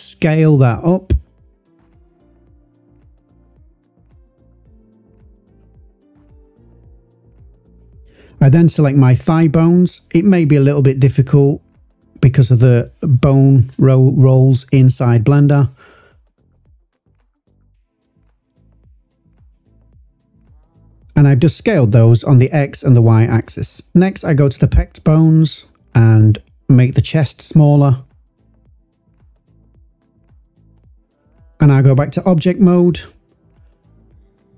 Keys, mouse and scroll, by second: 6.8 click, 8.2 click, 10.1 shift+click, 12.7 s, 13.9 x, 16.6 click, 17.5 click, 18.6 s, 19.0 y, 20.7 click, 21.3 click, 22.2 click, 23.7 shift+click, 24.6 s, 29.5 click, 31.4 click, 33.0-33.5 scroll down 1.